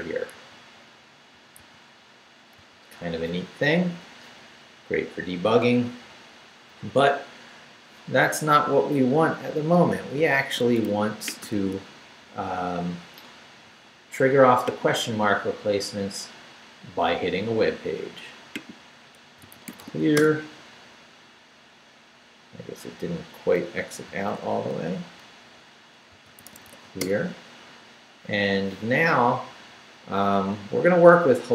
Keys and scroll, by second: 0.3 super+r, 1.6 super+r, 10.0 ctrl+c, 11.5 ctrl+c, 19.0-20.3 typing, 24.0 ctrl+c, 25.3 ctrl+Return, 25.8-27.1 typing.